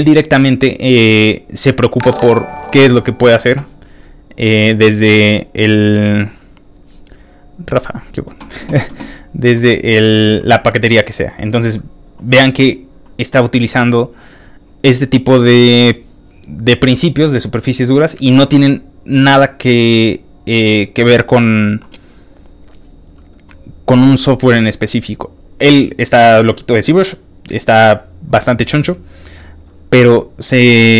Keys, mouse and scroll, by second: 0.5 scroll down 2, 1.0-1.8 scroll down 4, 1.8-2.2 scroll up 2, 4.3-7.9 drag, 9.2 middle click, 9.2 scroll down 1, 9.8 middle click, 10.9 middle click, 11.2 middle click, 11.2 scroll up 1, 11.8 middle click, 11.8 scroll down 1, 18.5 middle click, 18.6 middle click, 19.1 middle click, 19.6 middle click, 21.4-21.8 scroll down 2, 22.0-22.5 scroll down 5, 23.0-24.1 scroll down 2, 26.5-26.8 scroll down 1, 27.8-29.0 scroll down 5, 29.7-30.1 scroll down 1.